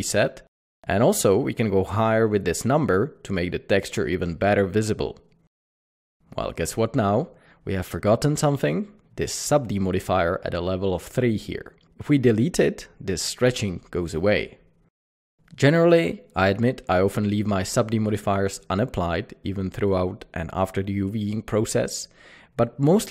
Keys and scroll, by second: 3.7 Return, 8.8 Tab, 16.4 alt+a.